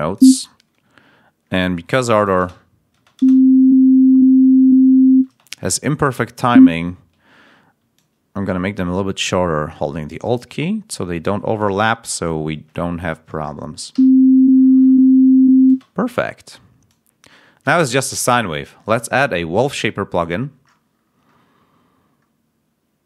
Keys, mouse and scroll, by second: 2.3 space, 6.4 ctrl+a, 6.8 ctrl+scroll up 1, 7.9-10.2 ctrl+alt+drag, 10.5 ctrl+alt+scroll down 3, 11.0-11.3 ctrl+scroll up 2, 11.6-12.2 ctrl+scroll down 2, 13.8 l, 16.8 click, 18.7 right click, 20.6-21.4 scroll down 2.